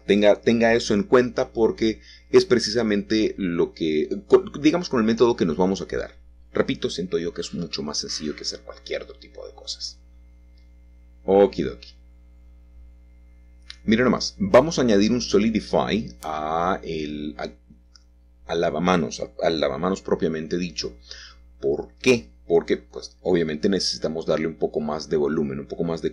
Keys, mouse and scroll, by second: 2.2 middle click, 4.7 middle click, 5.2-6.1 scroll up 3, 6.1 shift+middle click, 6.8 click, 9.0 click, 10.2 click, 13.0 click, 13.5-15.0 middle drag, 16.5 click, 17.0 click, 19.4-22.4 middle drag, 22.5 scroll down 2, 22.7-23.8 scroll up 3, 23.1-26.1 shift+middle drag.